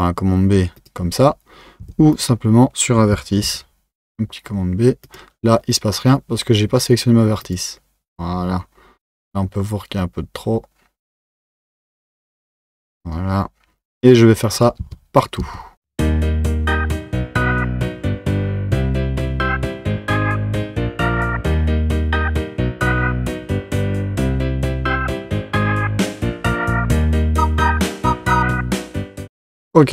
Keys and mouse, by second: 2.2 click, 3.4 b, 7.4 click, 9.2-12.2 drag, 14.6 click, 14.8 Tab, 15.4 Tab, 15.8-20.4 typing, 15.9 click, 16.7 click, 17.6 click, 17.8 click, 18.5 click, 19.0 click, 19.9 click, 21.5 click, 21.7 b, 22.2 click, 22.4 click, 23.3 1, 23.5 2, 23.8 click, 24.1 b, 24.9 click, 25.5 click, 25.8-27.4 typing, 27.2 click, 27.7 Tab, 28.6 Tab.